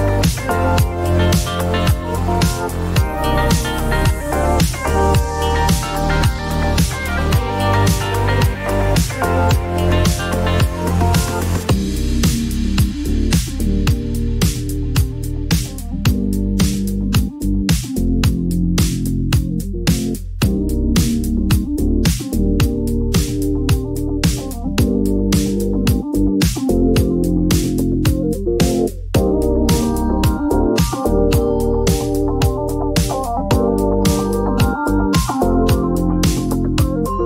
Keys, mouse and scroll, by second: 3.6 click, 4.3 click, 5.9 click, 8.8 click, 9.4-14.2 drag, 11.8 s, 17.4 click, 21.3-22.7 Up, 24.5 Up, 27.1 Up, 27.1 click, 28.2 click, 30.4 click, 31.0-33.4 drag, 33.5-36.9 drag.